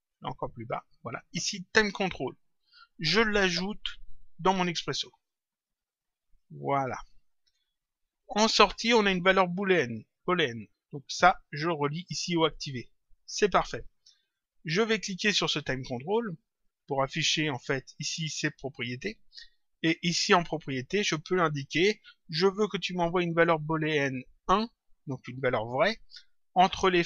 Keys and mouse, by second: 0.4 click, 2.0 click, 5.0 click, 6.3 click, 11.2 click, 14.2 click, 16.6 click, 19.5 click.